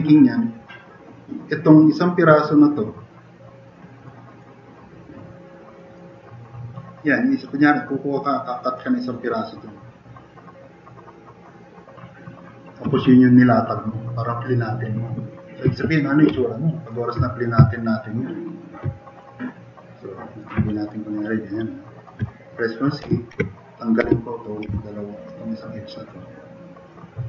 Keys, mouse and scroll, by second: 15.9-16.3 drag, 16.7 drag, 20.7 click, 21.3 click, 21.9 click, 22.8-24.7 typing.